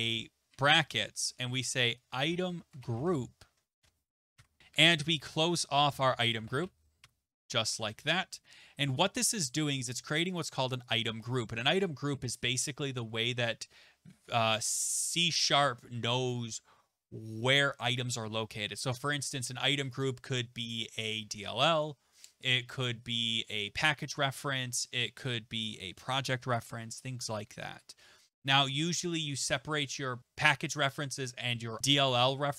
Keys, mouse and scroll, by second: 0.0-0.5 typing, 1.8-8.3 typing, 3.8 Return, 7.3 Left, 10.3 Delete, 10.3 Home, 10.4 click, 10.9 click, 12.1 typing, 13.1 Return, 18.2 typing, 28.5 click, 29.4 Tab, 29.9 Tab.